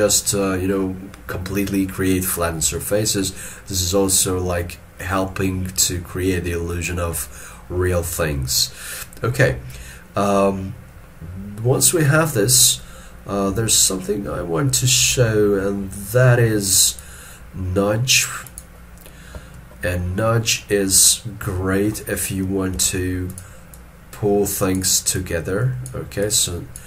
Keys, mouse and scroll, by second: 19.6 ctrl+middle click, 20.8 middle click, 23.7 double click.